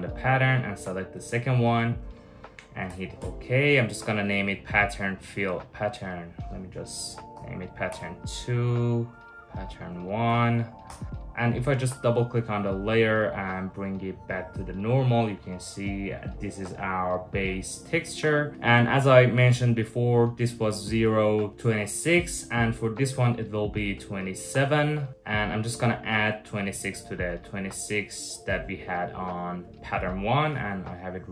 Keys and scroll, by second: 2.5 Return, 2.8 Return, 7.0 2, 7.5 Return, 9.9 typing, 10.5 Return.